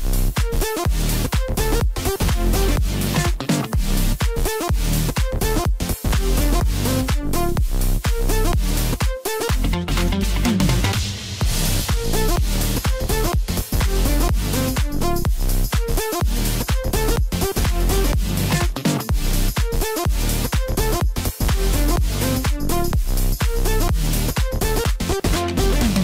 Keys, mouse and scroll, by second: 0.4 s, 1.3 middle click, 2.0 e, 7.4-8.4 middle drag, 8.4 g, 15.6-16.9 middle drag, 16.9 click, 17.8 shift+click, 18.7 shift+click, 19.2-20.5 middle drag, 20.5 i, 22.4 click, 23.7-26.0 drag.